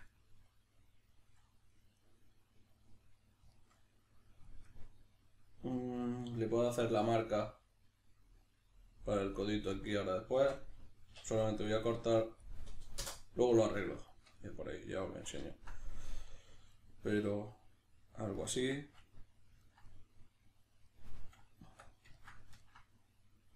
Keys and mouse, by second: 0.1-23.5 middle drag, 11.1 k, 21.6 Tab.